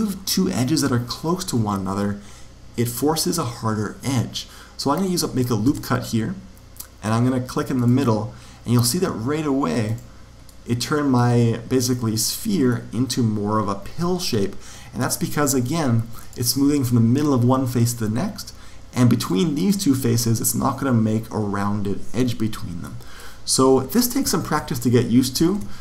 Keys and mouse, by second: 5.6 ctrl+r, 10.3-14.6 middle drag, 16.1 click, 19.1 right click, 21.0 click, 23.7 ctrl+z, 24.2 ctrl+z, 24.5 ctrl+z, 24.9 ctrl+z, 25.3 ctrl+z.